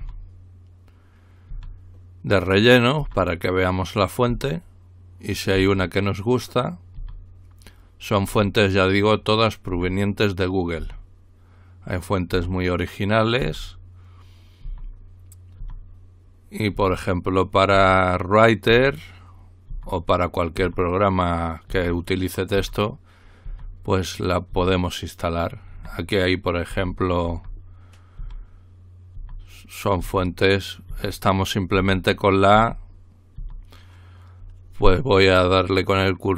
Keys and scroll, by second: 0.0 typing, 1.5 typing, 3.0 typing, 4.3 typing, 5.6 typing, 7.0 typing, 8.3 typing, 9.7 typing, 10.8 typing, 12.3 typing, 13.4 typing, 14.6-15.6 typing, 16.7-20.6 typing, 21.7-23.5 typing, 24.5-33.4 typing.